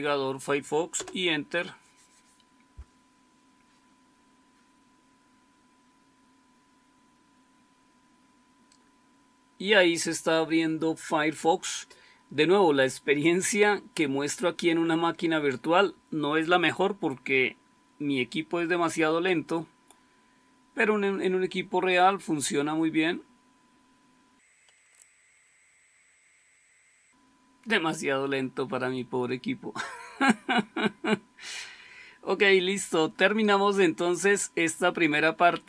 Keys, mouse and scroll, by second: 0.9 Return, 24.9 super+".